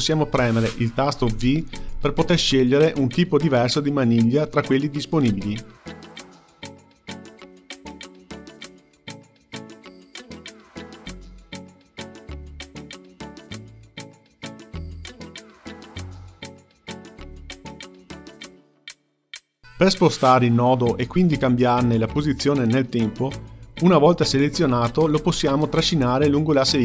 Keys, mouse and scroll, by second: 1.3 v, 4.9 click, 5.3 v, 8.0 click, 10.1 click, 11.0 click, 14.5-17.4 drag, 19.0 click, 21.2-26.3 drag.